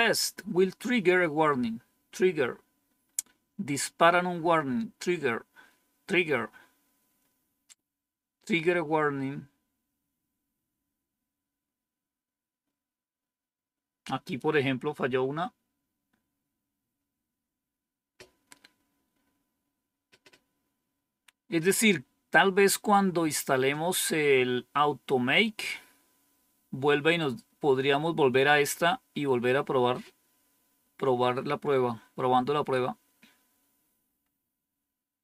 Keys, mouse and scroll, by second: 28.9-29.8 scroll down 2, 34.1-34.9 scroll up 1.